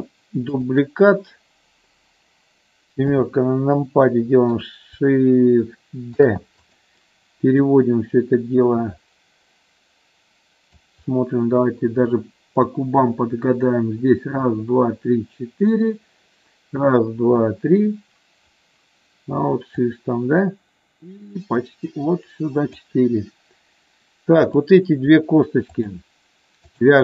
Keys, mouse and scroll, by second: 0.6 shift+click, 3.0 KP_7, 4.2 middle click, 6.1 shift+d, 6.5 click, 7.6-10.8 drag, 19.7-22.7 drag, 24.4 click, 25.6 shift+click.